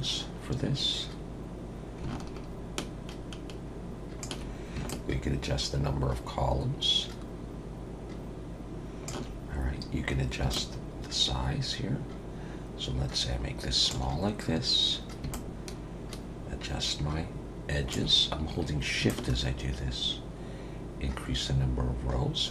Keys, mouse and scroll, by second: 4.9 shift+click, 10.5 shift+click, 15.3 shift+click, 19.1 shift+click.